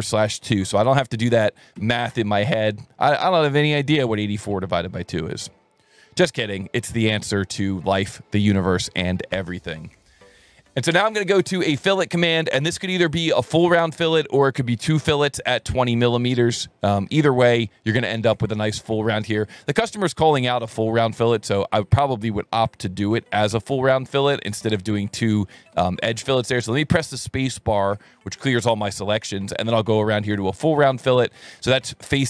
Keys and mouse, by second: 1.8 KP_Enter, 9.8 click, 11.7 click, 14.3 click, 15.0 KP_2, 15.3 KP_0, 15.5 KP_Enter, 17.2 click, 18.8 click, 25.7 space, 28.6 click, 30.5 click.